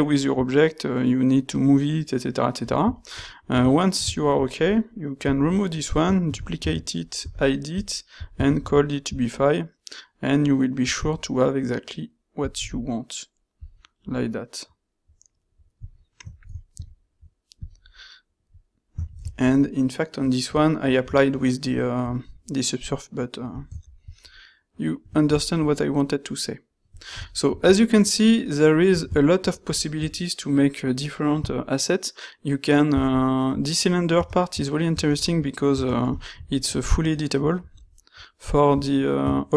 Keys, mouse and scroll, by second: 2.9 ctrl+middle click, 3.1 middle click, 6.3 shift+d, 7.3 h, 8.5 ctrl+shift+q, 14.1 middle drag, 14.3 middle click, 14.5 middle click, 35.5 middle click, 36.1 shift+middle click.